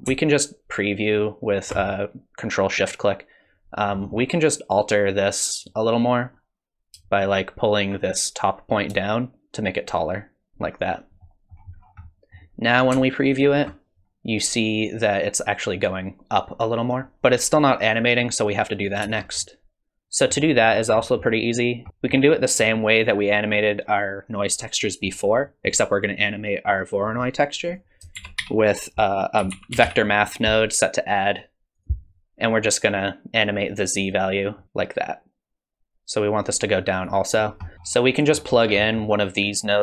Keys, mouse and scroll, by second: 0.3 ctrl+shift+click, 1.1 ctrl+shift+click, 3.7-4.1 scroll up 2, 4.0 middle click, 5.6 click, 9.1 shift+click, 11.2 middle click, 11.8-12.9 scroll down 5, 12.0 middle click, 13.4 ctrl+shift+click, 17.1 space, 19.0 space, 19.4 middle click, 20.8-21.9 scroll down 3, 21.0 middle click, 22.4 middle click, 24.6 middle click, 25.4 middle click, 27.1-27.6 scroll up 1, 27.6 click, 27.6-28.0 scroll up 4, 28.2 shift+a, 34.6 shift+click, 37.4-38.8 scroll down 10, 37.7 middle click, 38.1 middle click, 38.8 middle click.